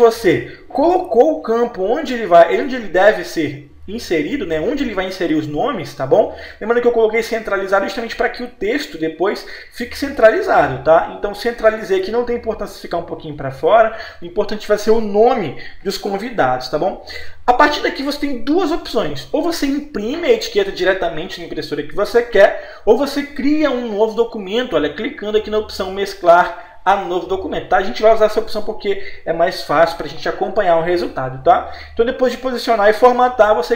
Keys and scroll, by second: 8.6 c.